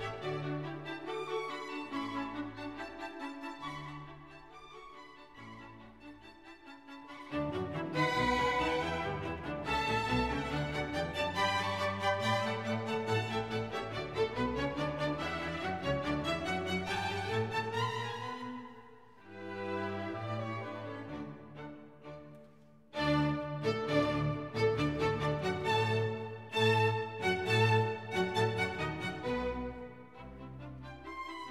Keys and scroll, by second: 0.2 e, 13.5 F1, 16.9 Escape, 20.2 F1, 22.4 Escape, 26.6 F1, 29.9 Escape.